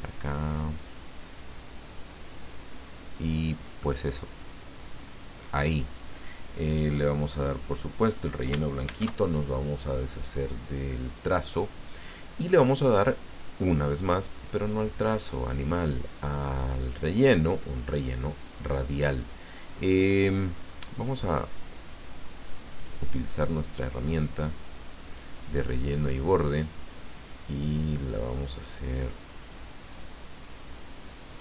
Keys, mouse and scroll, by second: 0.7 click, 3.1 click, 5.1 click, 7.6 click, 8.8 ctrl+shift+f, 10.9 click, 13.1 click, 15.2 click, 15.8 click, 16.6 click, 18.6-18.9 scroll down 2, 19.1 scroll down 2, 19.7-20.0 scroll up 1, 22.8 click, 24.1-25.3 drag, 26.8-29.6 drag, 31.3 click.